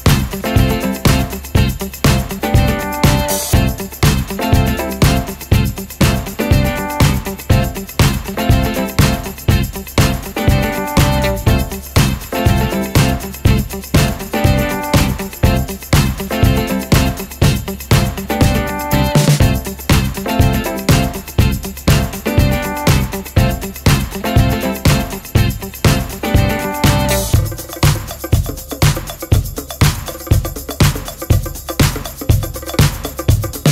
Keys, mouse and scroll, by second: 26.2 click, 27.2 ctrl+g, 28.2 click, 29.0 shift+click, 30.2 click, 32.1 ctrl+g.